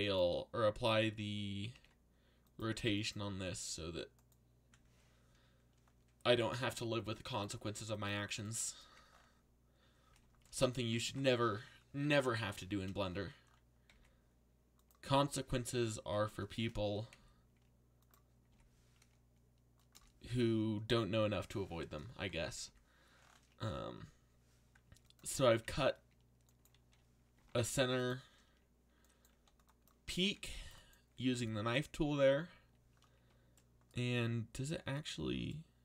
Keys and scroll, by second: 1.7 ctrl+a, 11.0 alt+a, 13.9 k, 15.2 k, 16.3 Return, 17.1 k, 18.5 k, 19.9 Return, 25.5 z, 27.1-28.0 typing, 29.3 c.